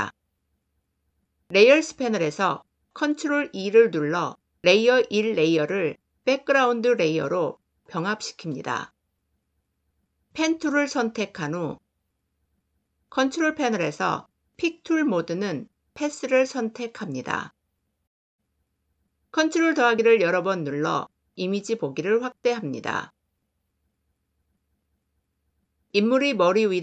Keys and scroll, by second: 2.9 ctrl+e, 10.3 p, 19.2 ctrl++.